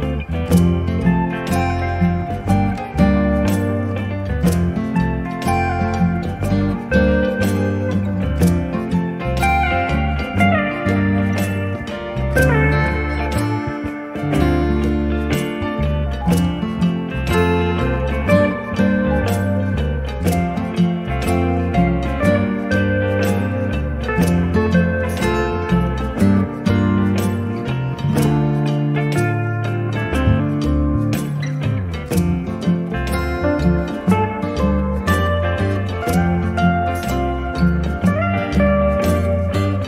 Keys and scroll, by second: 0.5 e, 10.4 p, 12.8 2, 13.5 Return, 19.3 space, 23.3 b, 28.8 space.